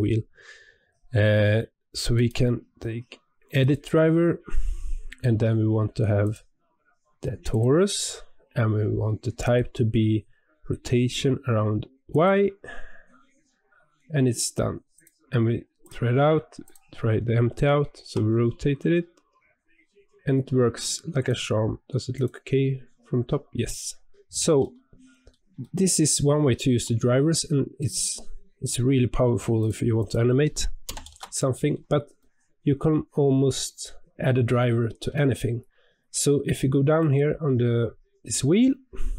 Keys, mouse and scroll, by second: 15.7 click, 16.6 click, 17.9 r, 22.1 click, 24.6-28.7 middle drag, 29.5 click, 29.9-32.1 drag, 32.1-33.1 shift+middle drag, 33.1-33.6 scroll up 3, 33.7 scroll down 1, 34.6-36.9 shift+middle drag, 36.9 click.